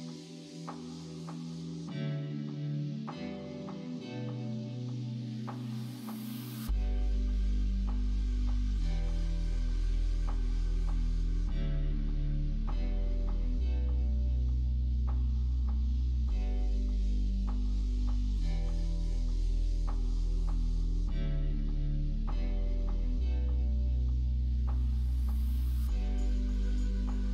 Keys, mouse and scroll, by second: 4.8 middle click, 5.9 click, 8.3 right click, 9.8-18.5 right drag, 19.2 middle click, 20.5 click, 22.3 middle click, 24.0 Tab, 24.9 ctrl+r.